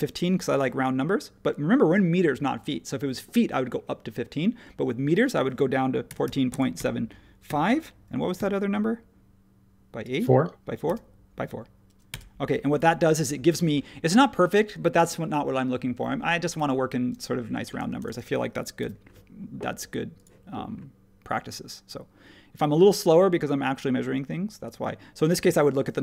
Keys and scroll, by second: 5.8-8.3 typing, 10.8 4, 12.1 Return, 13.2 space, 17.8 space, 18.8 r.